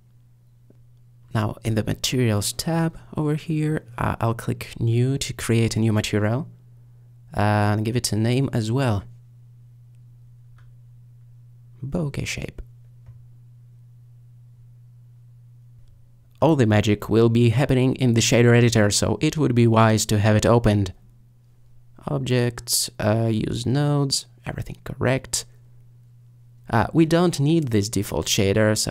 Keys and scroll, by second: 10.0-12.0 typing, 12.1 Return.